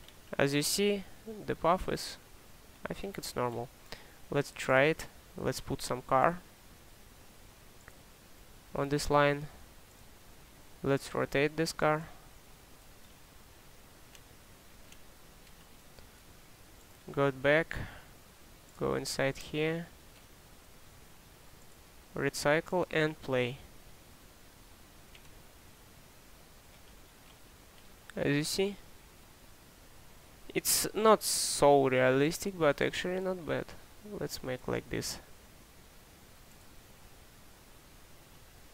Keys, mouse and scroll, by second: 7.7-8.5 typing, 11.2 k, 12.9-13.7 typing, 26.9 click.